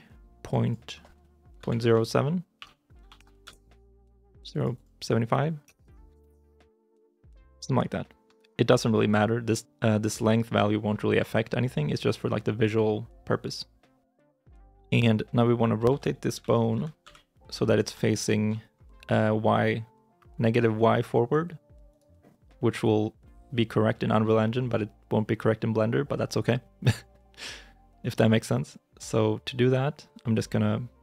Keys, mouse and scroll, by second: 1.1 shift+middle click, 1.7-3.0 typing, 3.3 Return, 4.6 double click, 5.5 BackSpace, 6.0 5, 6.1 Return, 7.1 scroll down 1, 7.8 shift+middle click, 14.6 KP_6, 15.8 KP_3, 16.2 KP_1, 16.6 KP_3, 16.9 KP_9, 18.0 shift+middle click, 18.6 scroll up 1, 19.6-21.6 scroll down 1, 22.5 right click.